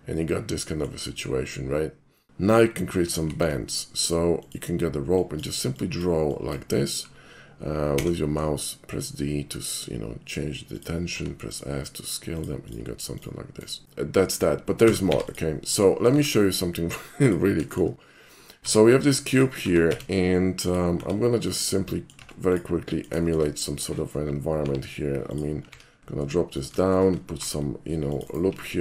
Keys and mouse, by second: 2.5 middle click, 3.3 alt+shift+c, 4.5 click, 5.2 click, 5.8 drag, 6.4 drag, 8.0 d, 10.8 shift+click, 11.1 s, 12.4 click, 13.7 right click, 13.8-14.3 shift+middle drag, 14.9 a, 15.1 x, 15.3 click, 15.7 middle click, 16.1 shift+a, 17.2 click, 17.7 shift+middle click, 18.0 shift+middle click, 18.6 s, 19.9 z, 20.7 click, 21.0 s, 21.5 click, 21.9 middle click, 22.2 Tab, 22.5 click, 22.8 middle click, 23.2 shift+middle click, 23.3 shift+click, 24.6 i, 25.3 click, 25.7 e, 26.6 shift+click, 27.3 ctrl+r, 28.2 click.